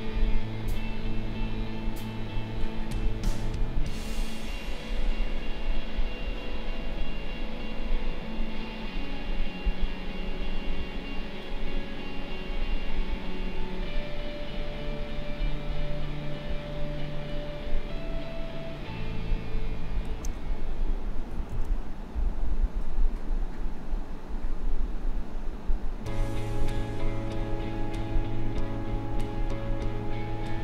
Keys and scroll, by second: 21.4 ctrl+z.